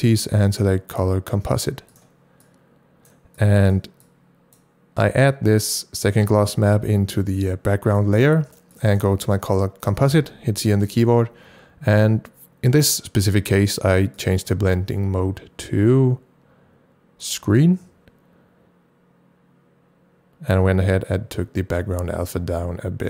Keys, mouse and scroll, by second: 2.1 click, 2.1 right click, 2.4-5.5 drag, 6.0-8.7 drag, 8.7 click, 8.9-10.1 drag, 10.1 c, 14.3 click, 17.2 click, 20.5-23.0 drag.